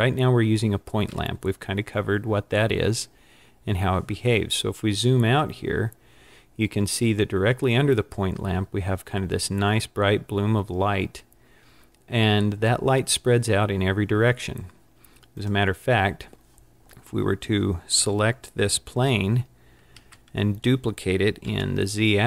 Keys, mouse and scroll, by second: 4.8-6.0 scroll down 7, 12.4 scroll down 3, 15.4 click, 20.0 shift+d.